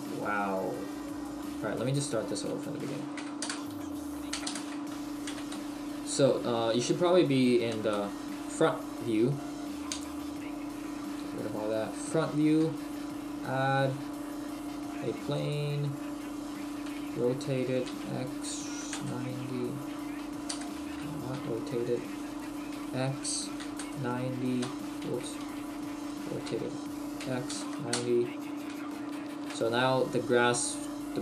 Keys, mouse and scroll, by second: 1.8 middle click, 2.5 a, 3.2 Delete, 4.3 Delete, 5.3 KP_1, 8.1 KP_1, 25.1 ctrl+z, 26.2 r, 29.2 shift+middle click, 29.6-30.1 scroll down 1, 31.1-31.2 scroll down 2.